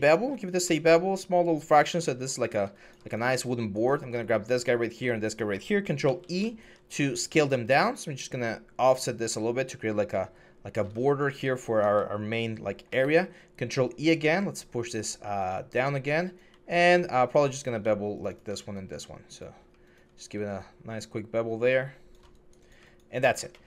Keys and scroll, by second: 5.8 ctrl+e, 12.7 ctrl+e.